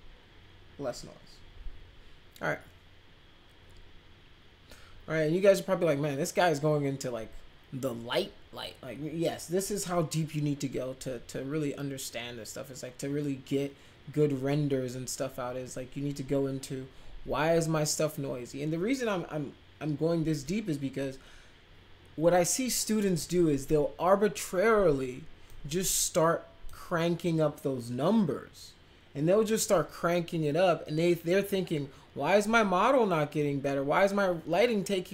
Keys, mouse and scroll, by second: 25.4-26.6 drag.